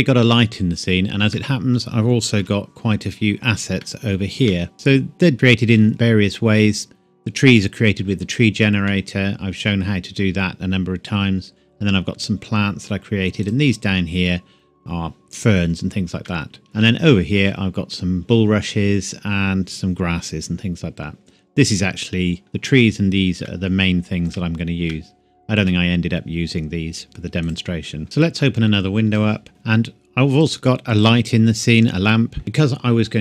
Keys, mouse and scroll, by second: 0.6 scroll down 1, 1.4 middle click, 2.4 KP_7, 2.9-3.8 scroll down 2, 3.8 shift+middle click, 5.3 shift+middle click, 5.6-6.6 shift+scroll up 2, 6.6-6.9 scroll down 1, 8.9 middle click, 11.6-13.4 scroll up 1, 13.4 click, 15.4-16.1 scroll down 1, 16.3 shift+middle click, 16.6 scroll up 1, 17.2 shift+middle click, 17.6-18.2 scroll up 1, 18.2 shift+scroll up 1, 18.8-21.2 scroll down 1, 23.5 shift+middle click, 26.7-27.4 scroll down 1, 27.4 click, 28.2 click, 29.5-30.2 scroll down 1, 30.4 click.